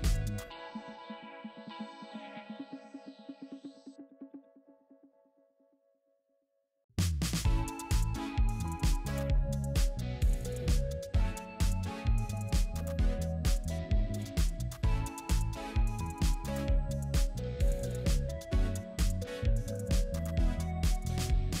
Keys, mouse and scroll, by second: 1.6 alt+click, 2.6 double click, 4.8 double click, 7.0 space, 14.6 space, 20.2 double click.